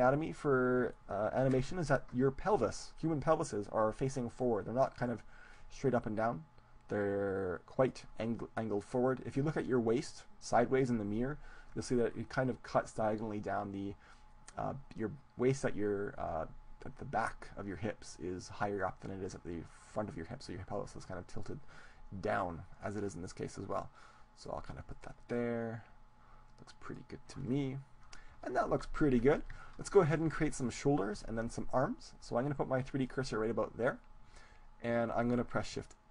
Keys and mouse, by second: 0.0 middle click, 0.2-1.6 drag, 1.6-2.7 middle drag, 5.2-7.0 right drag, 5.6-7.4 drag, 23.1-24.9 middle drag, 23.8-27.5 drag, 24.9-26.8 right drag, 27.5-29.6 middle drag, 29.6 KP_1, 31.1-32.2 middle drag, 33.4-35.0 drag.